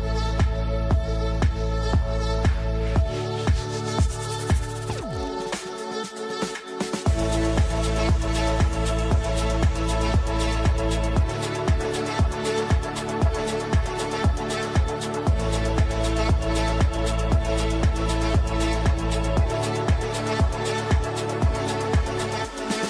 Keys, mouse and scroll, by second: 3.6 click, 3.6 shift+F2, 4.1 click, 4.4 F3, 6.2-8.8 drag, 8.8 e, 9.3 F2, 9.5-13.1 drag, 11.5-12.6 ctrl+drag, 13.6-15.0 ctrl+drag, 15.4 F3, 16.4 click, 17.5-18.5 drag, 18.7 ctrl+g, 19.6 p, 20.3 shift+F2, 21.2 click, 21.4 F2, 21.9-22.8 drag.